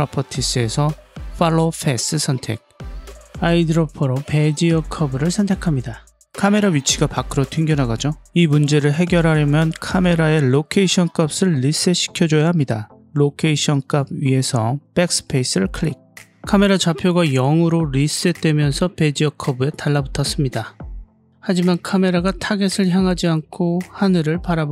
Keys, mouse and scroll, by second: 0.1-2.8 drag, 3.6 click, 6.7-8.0 scroll down 2, 11.2 click, 14.9 BackSpace, 18.3-19.5 scroll up 5, 19.5-21.3 scroll up 2.